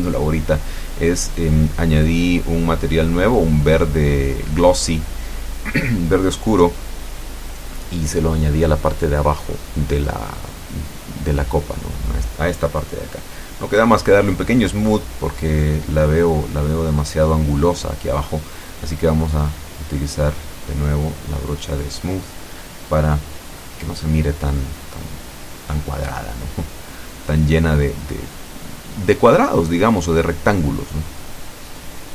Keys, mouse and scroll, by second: 0.1 click, 0.8 click, 4.6 middle click, 6.0 click, 7.1-8.6 middle drag, 8.7 shift+middle click, 9.5-9.9 shift+scroll up 1, 12.5 click, 14.0 click, 14.8 click, 15.7 click, 16.7 click, 17.9 middle click, 19.0 click, 19.9 middle click, 20.8 click, 21.8 middle click, 22.7 click, 23.4-24.7 shift+middle drag, 24.9 click, 25.6-26.6 drag, 26.8 middle click, 27.7-29.3 drag, 30.3 middle click, 31.3-32.1 middle drag.